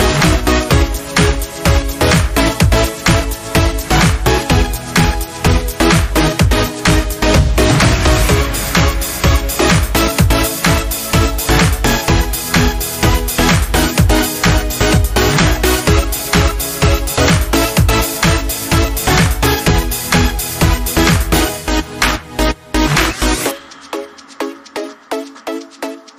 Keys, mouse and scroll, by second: 0.2 click, 6.8 click, 11.3 click, 13.0 scroll down 1, 14.8 click, 20.4-26.1 alt+drag.